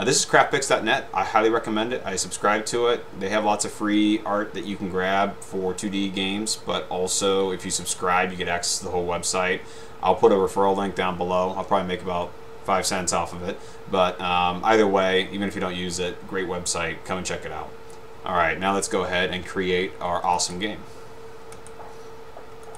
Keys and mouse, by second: 20.5 click.